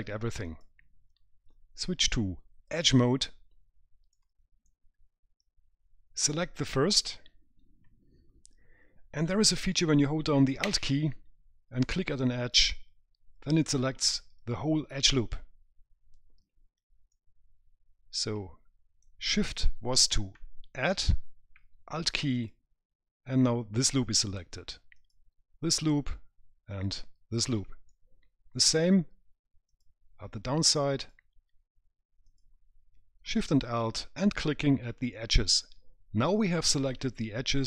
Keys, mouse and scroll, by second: 0.7 click, 2.9 click, 4.3 right click, 5.2-6.0 scroll up 1, 6.4 click, 12.6 alt+click, 17.3 right click, 22.6 alt+shift+click, 28.1 right click, 29.9 alt+shift+Left, 35.4 right click.